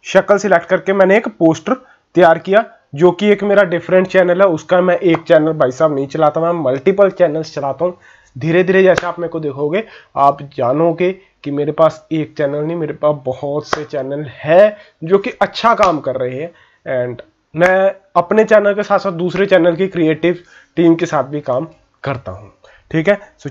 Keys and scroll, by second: 2.0 ctrl+-, 2.6 ctrl+-.